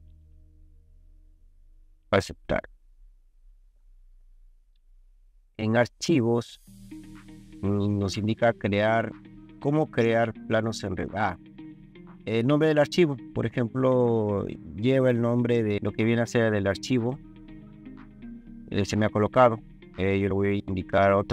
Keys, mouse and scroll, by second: 2.1 click, 13.1 click.